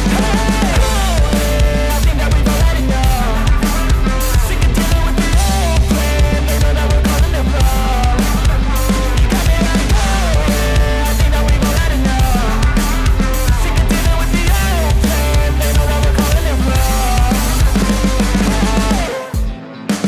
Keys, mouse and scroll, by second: 5.8 ctrl+z.